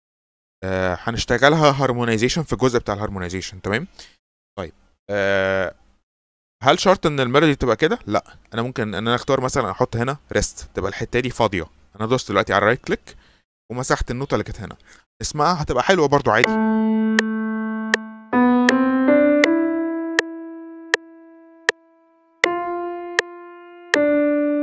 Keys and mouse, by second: 10.1-12.1 right drag, 12.7 right click, 13.4-14.6 right drag, 16.3 click.